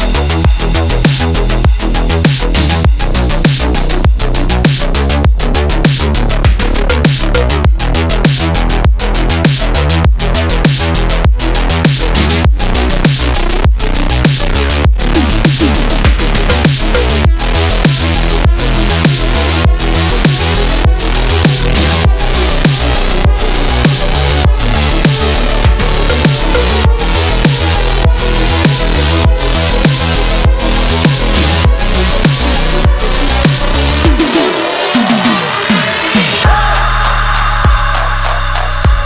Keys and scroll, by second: 0.0 g, 0.5 g, 0.8 KP_3, 1.9 KP_1, 3.9 KP_3, 5.9 q, 8.5 q, 9.1 ctrl+KP_1, 11.2 ctrl+c, 11.9 space, 13.6 ctrl+v, 13.9 Return, 20.9 p, 25.1 x, 33.5 ctrl+z, 37.8-39.0 typing.